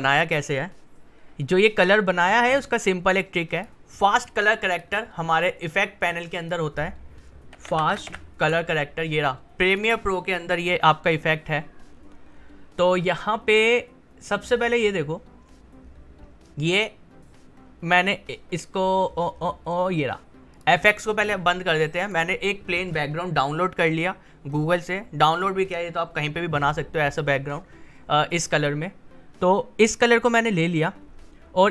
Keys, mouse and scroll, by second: 3.5 click, 7.3-8.6 typing, 9.7 click, 11.9-13.7 scroll down 1, 17.7 scroll up 1, 18.7-20.5 scroll up 1, 20.5 click, 25.3 click, 31.3-31.7 scroll down 1.